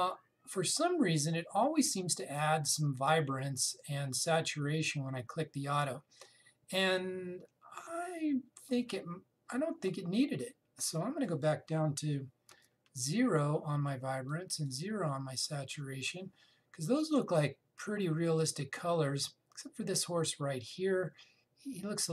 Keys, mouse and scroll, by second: 11.5 click, 13.3 0, 15.0 click, 15.4 0.